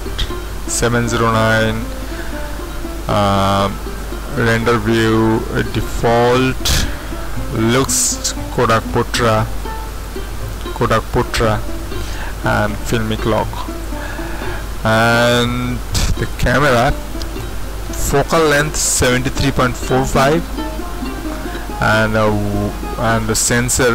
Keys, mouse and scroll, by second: 4.3 click, 8.7 click, 12.8 click, 13.7 click, 16.2 click.